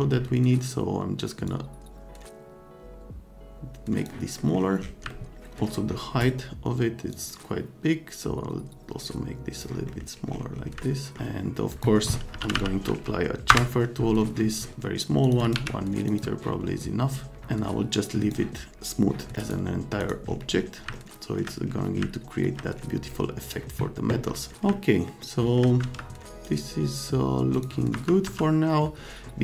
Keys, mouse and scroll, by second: 1.4-4.0 drag, 4.4 middle click, 5.1-5.4 scroll up 2, 6.2 right click, 7.1-9.6 drag, 9.9 middle click, 10.1 scroll down 2, 10.9 middle click, 11.1 F3, 11.7 click, 12.1-13.1 typing, 13.5 Return, 15.2 click, 15.4 click, 15.5 1, 16.1 click, 18.0 middle click, 19.4 scroll down 2, 20.0 middle click, 20.3 click, 20.9 middle click, 22.0-22.3 scroll up 2, 22.3 click, 24.7 middle click, 24.8 right click, 25.2 right click, 25.8 z, 26.4 scroll up 2, 27.5 click, 27.9 F3, 28.2 F3.